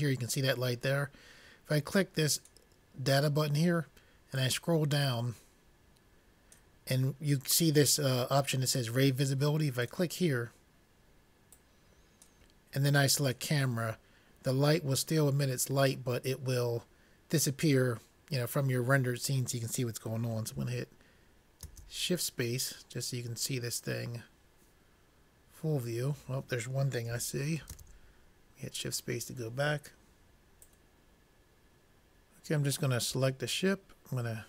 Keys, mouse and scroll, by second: 2.7-4.3 drag, 4.8-6.4 drag, 10.3-15.0 drag, 21.9 shift+space, 28.4 shift+space, 33.5-34.4 drag.